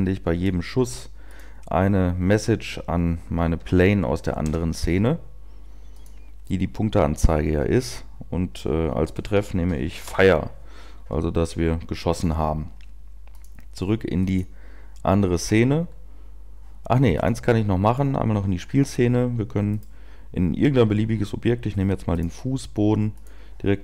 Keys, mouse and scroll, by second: 14.3 click, 18.1 click, 19.7 right click.